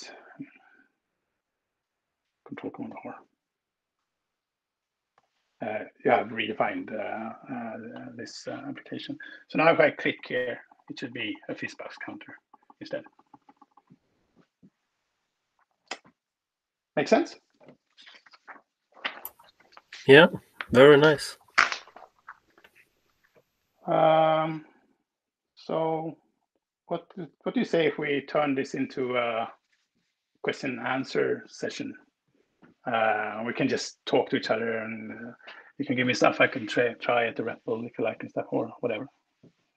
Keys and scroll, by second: 2.7 ctrl+super+r.